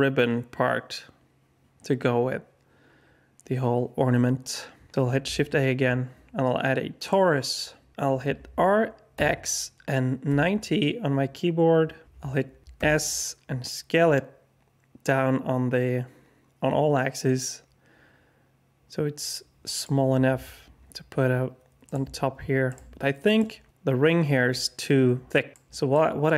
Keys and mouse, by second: 5.2 shift+a, 7.9 r, 12.7 s, 20.4 g, 22.0 s, 22.7 g, 25.3 alt+drag, 25.9-26.2 middle drag.